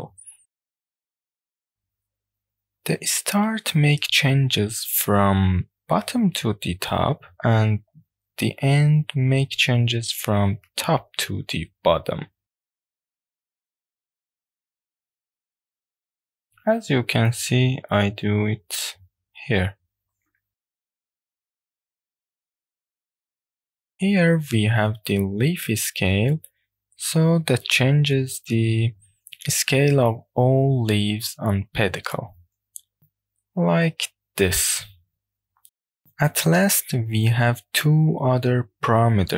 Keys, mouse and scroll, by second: 0.5 click, 2.9 click, 3.5-4.7 drag, 6.6 click, 12.2-16.2 drag, 18.6-22.6 drag, 22.9 w, 28.5-33.2 drag, 33.6-34.1 middle drag, 34.7 click, 35.8 shift+middle click, 36.1-36.7 scroll up 2, 36.4 middle click, 36.8-37.1 scroll down 1, 37.2 shift+middle click, 37.6 scroll down 1.